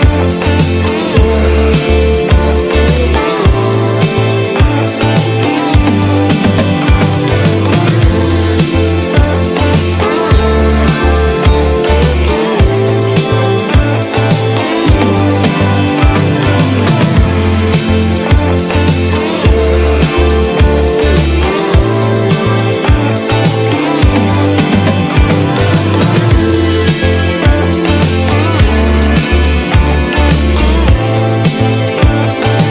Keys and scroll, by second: 14.3 space, 16.2 space, 28.2 space, 30.2 space.